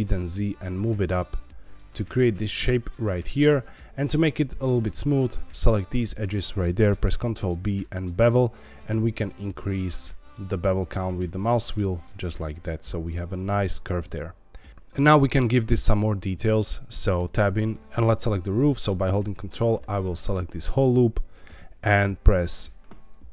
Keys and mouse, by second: 0.0 z, 2.5 click, 2.8-4.3 middle drag, 5.5 click, 6.1 shift+click, 7.2 ctrl+b, 13.3 click, 13.7 Tab, 14.1 middle click, 15.5 middle click, 17.1 Tab, 17.6 3, 17.8 ctrl+z, 18.6 middle click, 19.4 ctrl+click, 20.3 middle click.